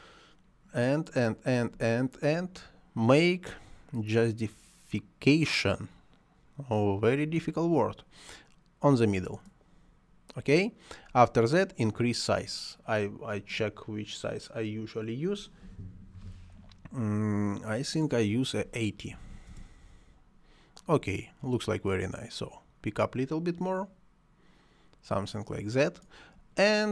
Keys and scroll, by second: 19.2 8, 19.3 0, 19.5 Return.